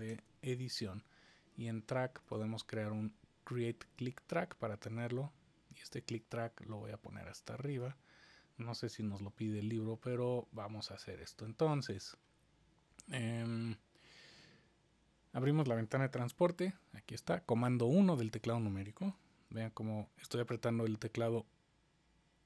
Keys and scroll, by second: 0.0 super+=, 16.1 super+1, 19.1 super+1, 21.0 super+1.